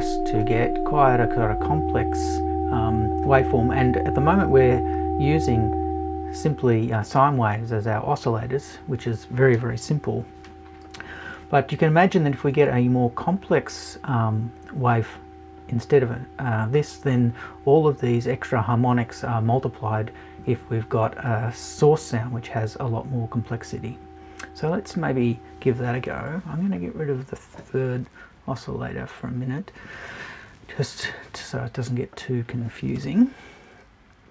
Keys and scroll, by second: 26.2 BackSpace, 31.0 BackSpace, 33.0 BackSpace.